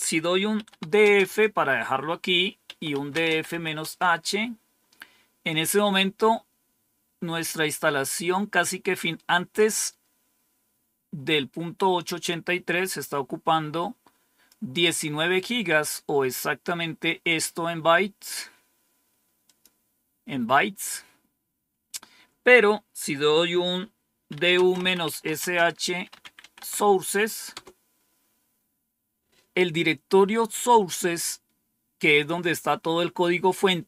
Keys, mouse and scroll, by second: 0.2-1.2 typing, 2.8-3.7 typing, 12.2-14.4 drag, 16.3-18.2 drag, 19.4 click, 24.0-26.8 typing, 27.4 Return.